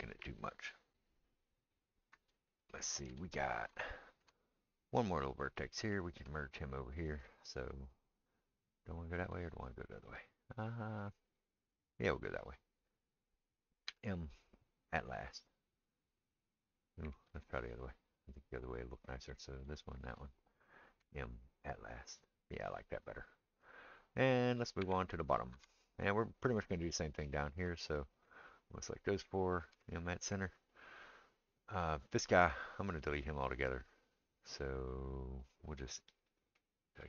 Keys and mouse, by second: 5.0 click, 5.1-6.5 middle drag, 6.5 shift+click, 6.6-18.7 shift+middle drag, 13.9 m, 17.3 ctrl+z, 18.7 click, 18.8 middle click, 19.3 click, 19.4 middle click, 19.9 shift+click, 20.0-28.7 shift+middle drag, 21.0 m, 24.8 Tab, 25.5 Tab, 28.7-37.0 drag, 29.7 m, 36.5 middle click.